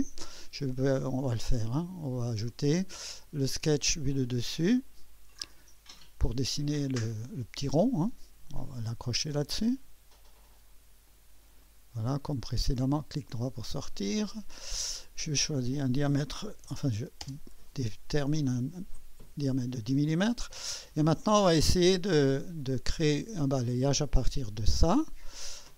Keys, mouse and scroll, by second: 0.0 click, 1.4 click, 2.5 click, 4.0 click, 5.3 click, 6.6 click, 8.3 click, 10.3 click, 11.1 click, 13.7 click, 15.5 click, 16.2-17.2 typing, 17.2 Return, 18.9 click, 22.2 click, 25.0 click.